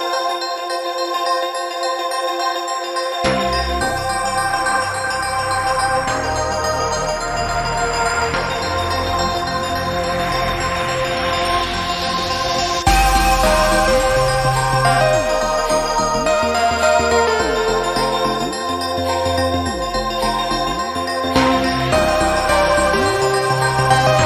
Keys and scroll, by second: 5.6 ctrl+t.